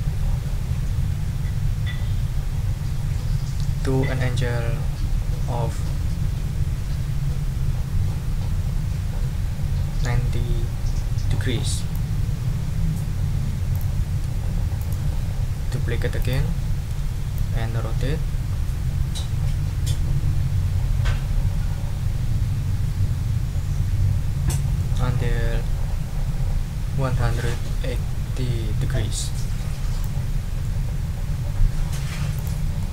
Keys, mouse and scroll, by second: 13.7 shift+click, 14.8 right click, 16.2 click, 17.3 ctrl+click, 26.1-30.0 ctrl+drag, 30.6 ctrl+middle click, 30.7-32.1 drag, 32.3 click, 32.8 click.